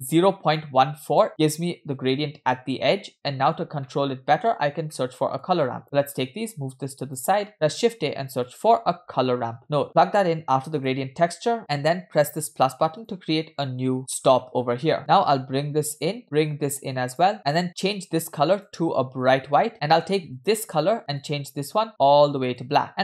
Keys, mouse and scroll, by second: 3.6 scroll down 2, 3.9-4.5 middle drag, 4.9 middle click, 5.5-5.8 drag, 6.1-7.2 drag, 7.5 middle click, 7.5 shift+a, 11.4 click, 13.0-13.3 drag, 14.0 click, 14.6-15.1 scroll up 3, 14.9 middle click, 15.1-16.1 drag, 16.5-17.6 drag, 18.6 click, 20.4 click, 21.2 click, 22.9-23.0 drag.